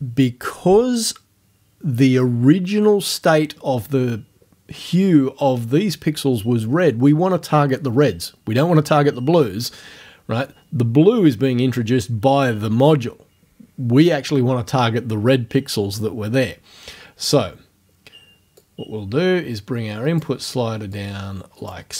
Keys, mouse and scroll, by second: 18.6-20.4 drag, 21.0 click.